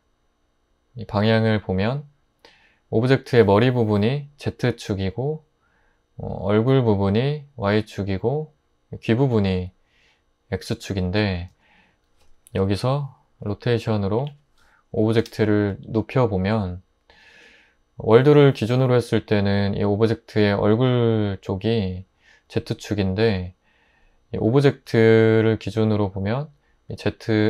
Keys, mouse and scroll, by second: 14.2 typing, 15.2 Return.